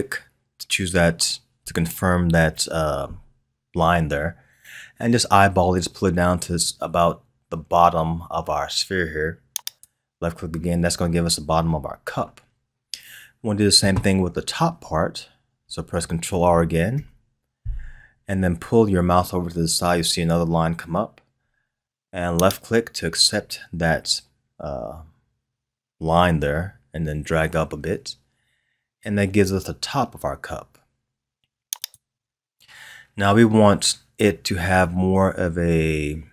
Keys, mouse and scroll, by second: 16.9 ctrl+r.